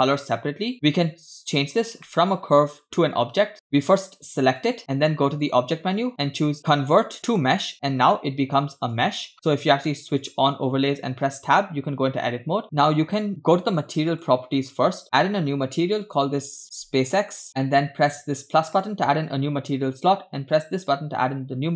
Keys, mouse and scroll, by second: 2.1-2.6 shift+middle drag, 3.5 click, 4.6 click, 5.4-7.7 drag, 8.9 click, 10.3 click, 12.6 Tab, 14.1 click, 15.1-15.6 drag, 16.0-17.5 drag, 18.7-19.1 drag, 20.5-21.0 drag.